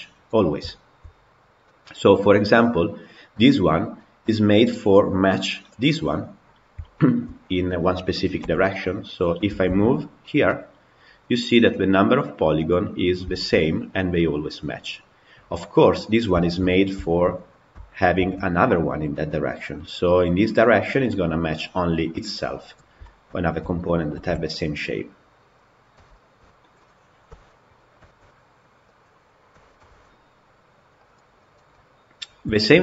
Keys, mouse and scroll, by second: 0.5 shift+middle click, 1.2 scroll down 1, 1.5-2.5 middle drag, 2.5 click, 4.5 click, 5.7-8.3 middle drag, 8.3 g, 12.6-13.0 scroll up 3, 13.1-15.1 shift+middle drag, 15.1-16.2 scroll down 2, 16.2-18.0 shift+middle drag, 18.0 shift+d, 22.9-24.0 shift+middle drag, 24.0 shift+d, 25.9 shift+click, 27.1 Delete, 27.7 scroll down 3, 27.9 shift+middle click, 28.7 click, 29.4 g, 31.2 click, 31.6 middle drag, 31.8-32.4 scroll up 2, 32.4-32.8 shift+middle drag.